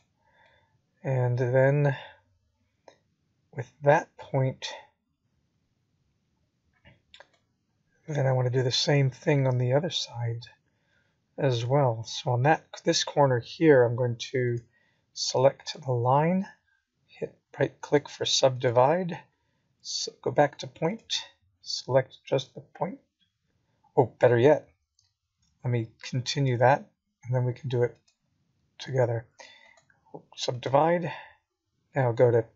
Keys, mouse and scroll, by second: 1.1 right click, 2.5 click, 3.9 right click, 6.4-6.9 scroll down 1, 8.8 click, 11.5 click, 13.0 g, 18.9 middle click, 26.6 middle click.